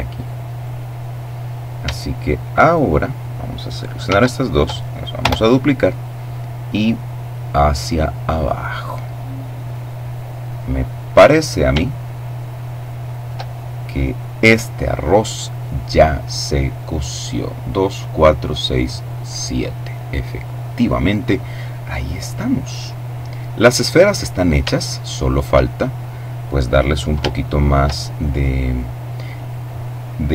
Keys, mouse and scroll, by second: 1.9 shift+right click, 3.3 d, 4.5 Return, 5.3-8.0 drag, 9.8-11.3 middle drag, 22.2-22.7 scroll down 2, 22.7 middle click, 24.0-25.0 shift+middle drag, 25.0-26.4 shift+scroll down 3, 26.4 scroll down 1, 26.7 shift+middle click, 30.1 z.